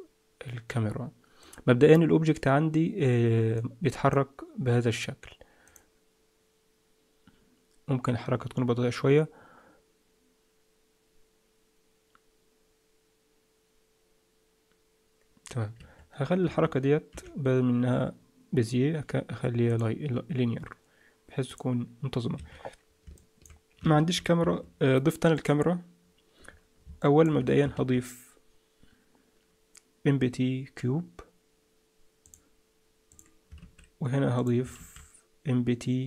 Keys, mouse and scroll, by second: 2.2 click, 3.5 click, 5.7 click, 15.7 Escape, 16.4 a, 17.1 t, 21.5 click, 22.3 Escape, 23.1 middle click, 23.9 shift+a, 25.3 click, 26.5-26.8 scroll up 3, 27.0 shift+middle click, 27.7 shift+a, 33.1 click, 33.6 shift+s, 34.7 shift+a.